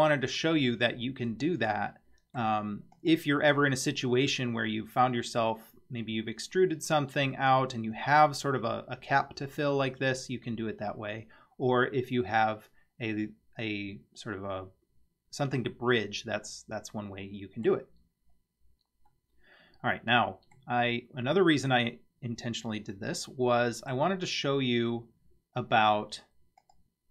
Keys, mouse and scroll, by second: 0.6-2.4 middle drag, 3.0 click, 16.5-17.7 middle drag, 18.1 scroll down 2, 19.1-20.6 middle drag, 22.9-24.0 middle drag, 26.6-27.1 drag.